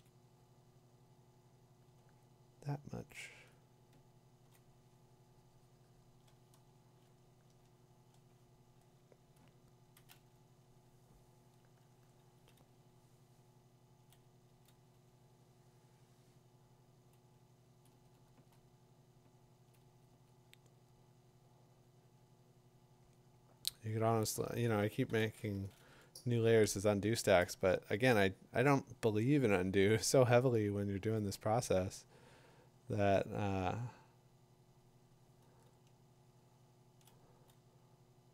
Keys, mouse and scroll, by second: 0.1 click, 0.8 click, 0.8 [, 3.3 click, 4.4 2, 4.9 4, 7.3 shift+[, 9.9 click, 13.7 click, 14.2 click, 17.8-18.9 typing, 17.8 click, 19.7 click, 19.9-20.6 typing, 25.2 ctrl+shift+n, 29.2 Return, 30.8 click, 33.5 click, 37.0 click, 37.2 click.